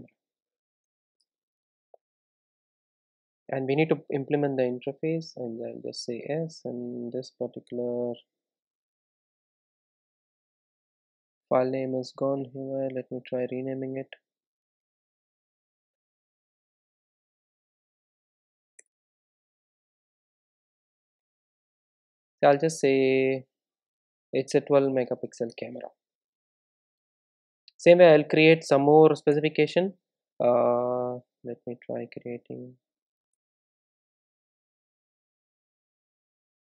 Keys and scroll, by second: 17.5 shift+F6, 22.7 Tab, 27.7 super+s, 31.7 super+Return, 32.2 super+Return, 32.8 super+z, 33.4 alt+Return.